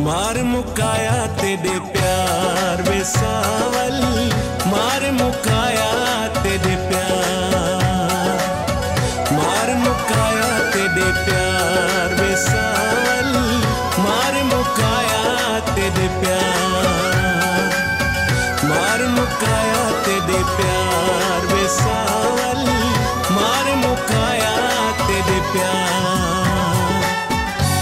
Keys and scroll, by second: 3.8 F8, 6.6 ctrl+z, 8.2 ctrl+s, 12.3 ctrl+u, 16.7 ctrl+s.